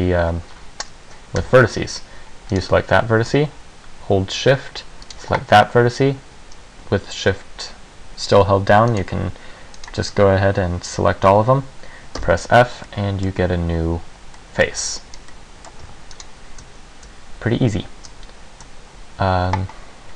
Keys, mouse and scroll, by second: 1.5 a, 2.7 right click, 5.2 shift+right click, 9.0 shift+right click, 9.9 shift+right click, 12.3 f, 13.0 middle click, 14.5 middle click, 14.9 Tab, 15.3 scroll down 1, 15.4 middle click, 15.9 Tab, 16.3 right click.